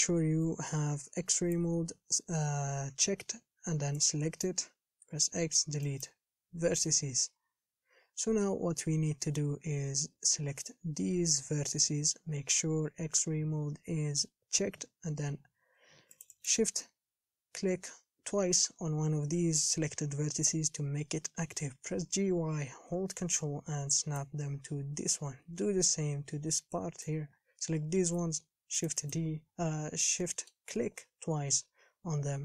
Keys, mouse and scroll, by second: 1.7-4.7 drag, 4.7 b, 6.2 x, 7.8-8.2 scroll down 3, 8.2-9.3 scroll up 5, 10.5 b, 16.6 shift+click, 22.1 g, 25.5 a, 27.2 b, 30.2 scroll up 4, 30.4-32.4 shift+middle drag.